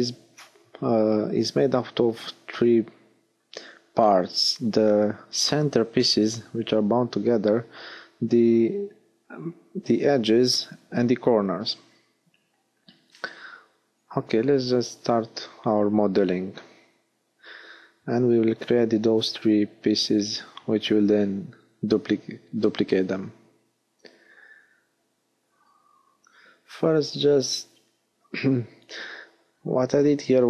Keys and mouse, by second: 7.7 s, 11.0 click, 13.5 KP_1, 15.9 Tab, 16.8 middle click, 23.2 shift+d, 26.5 click, 28.3 shift+d, 29.3-30.4 middle drag.